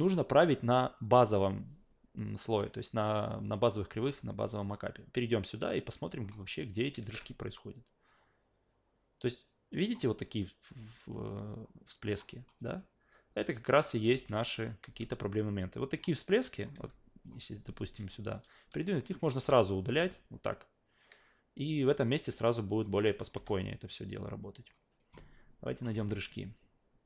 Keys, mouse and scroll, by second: 5.2 click, 6.3 alt+middle click, 7.4-9.9 drag, 11.9 drag, 12.6 click, 13.5-14.0 drag, 14.1 alt+v, 14.8 alt+v, 15.3 click, 16.4 click, 16.7 f, 17.2 click, 18.9 click, 19.4 Delete, 20.5-21.0 alt+right drag, 22.4-22.8 alt+right drag, 23.1 click, 23.3 f, 24.7 click, 25.7 click, 25.9 alt+v.